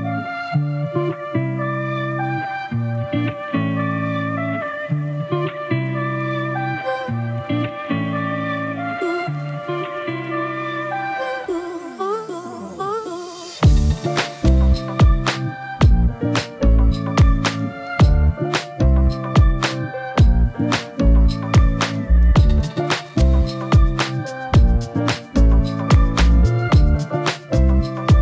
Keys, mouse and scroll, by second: 1.9-2.6 typing, 2.1 click, 3.5 click, 6.0 click, 10.3 click, 13.7 click, 14.5 click, 16.8 click, 17.4 2, 17.5 Return, 20.1 click, 21.5 click, 22.5 click, 23.4 click, 27.3 right click, 27.4 click.